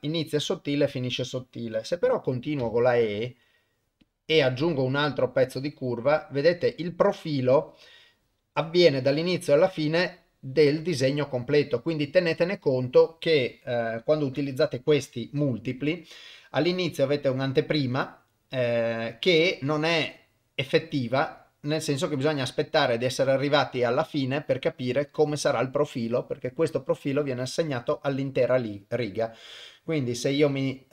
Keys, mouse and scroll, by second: 15.7 click, 16.5-22.2 drag, 30.3-30.9 drag.